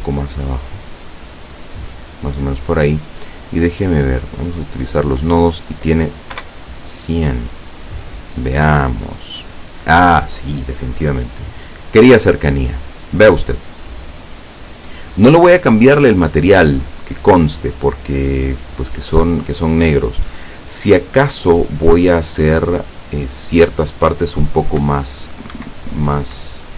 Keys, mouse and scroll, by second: 0.3-2.1 drag, 3.3 click, 4.6 click, 6.4 F12, 25.6 Escape, 26.1-26.7 scroll up 2.